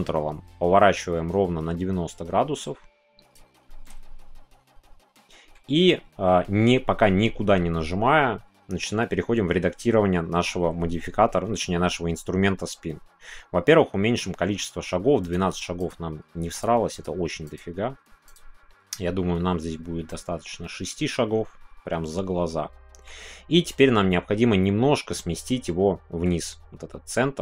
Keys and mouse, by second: 3.3 ctrl+click, 3.8-5.5 middle drag, 15.3-20.1 drag, 20.1-23.0 middle drag, 23.7-27.4 middle drag.